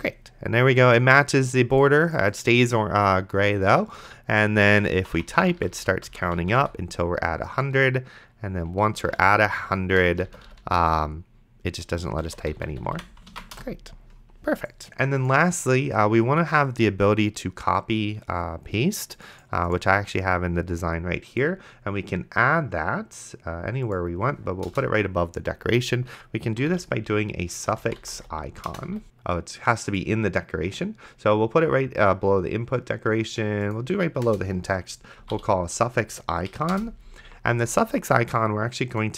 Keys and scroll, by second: 5.3 d, 9.3 ctrl+c, 10.5 ctrl+v, 13.6 BackSpace, 25.0 Return, 26.4-28.9 typing, 29.1 ctrl+s, 34.5 Return, 35.0-35.9 typing, 36.5 Down, 36.7 Return.